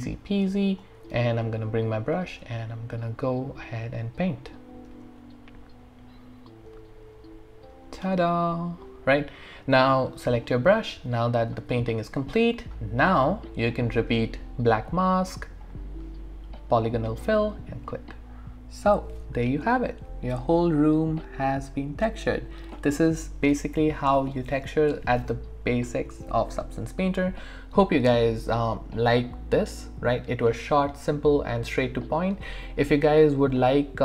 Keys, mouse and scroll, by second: 1.8-9.8 drag, 10.5 alt+right click, 10.8-12.5 alt+drag, 12.5 right click, 13.8 click, 20.8-34.0 alt+drag.